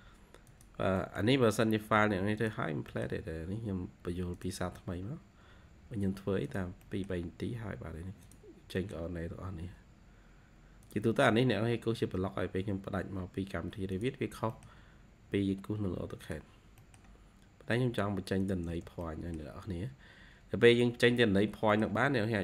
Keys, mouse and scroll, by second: 0.9 middle click, 1.6-2.3 scroll up 1, 2.6 scroll down 2, 5.4-6.4 scroll up 1, 6.7 middle click, 8.4 scroll down 2, 8.7 middle click, 9.2 scroll up 2, 10.4 scroll up 1, 11.5-12.3 scroll down 4, 12.3-13.5 scroll up 4, 14.1 scroll down 1, 14.4 middle click, 15.1-15.7 scroll up 4, 16.4 scroll down 2, 16.7 middle click, 18.6 space, 18.6 scroll down 1, 18.9 middle click, 19.7-21.1 scroll up 4, 21.2-21.6 scroll down 2, 21.6 middle click.